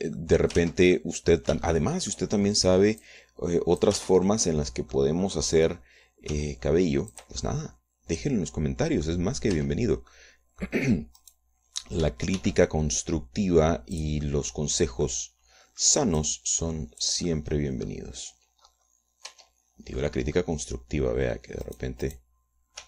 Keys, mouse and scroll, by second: 0.5 click, 1.6 click, 2.0 ctrl+z, 2.3 ctrl+click, 2.9 shift+middle click, 4.5 click, 5.4 ctrl+z, 5.7 ctrl+middle click, 7.7 g, 8.5-10.7 drag, 10.9 Tab, 12.6 right click, 13.8 shift+d, 15.4 click, 16.0 click, 17.6-18.7 drag, 18.7 click, 20.1-20.5 scroll up 2, 20.7 Tab, 21.4 click.